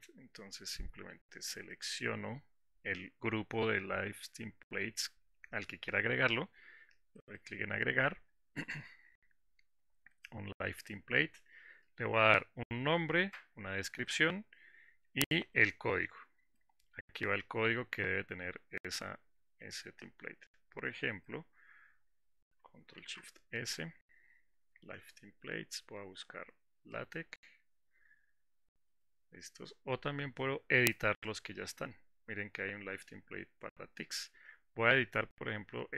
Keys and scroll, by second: 23.8 ctrl+alt+s.